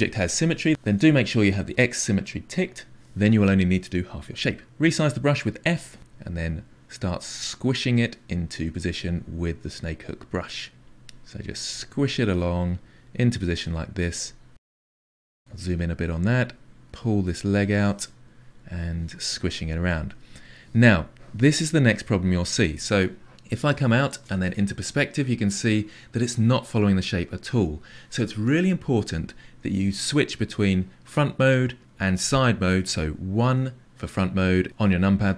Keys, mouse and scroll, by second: 0.7 click, 4.7 f, 6.1-8.2 drag, 8.4 click, 9.3-10.8 drag, 10.9 click, 11.5 click, 12.1 click, 12.5-14.5 drag, 14.5-16.0 ctrl+middle drag, 16.0-17.5 drag, 18.2 click, 19.2 click, 19.7 click, 20.1 click, 20.3 click, 21.4-23.6 drag, 23.6-33.4 ctrl+middle drag, 33.4 KP_1.